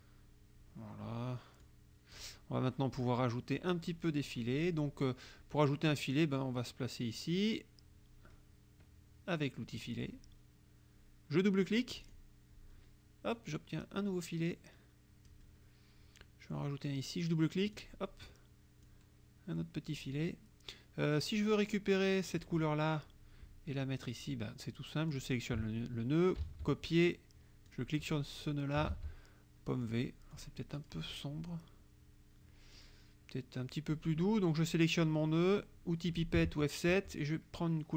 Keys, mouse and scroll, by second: 1.6 click, 3.1 click, 4.0 click, 9.8 click, 12.0 click, 13.5-15.5 drag, 17.7 click, 18.9-20.1 drag, 22.4 click, 25.2 click, 26.5 ctrl+c, 27.7 click, 29.0 ctrl+v, 29.9 click, 30.4 click, 30.8 click, 32.8 click, 35.0 click, 37.0 F7.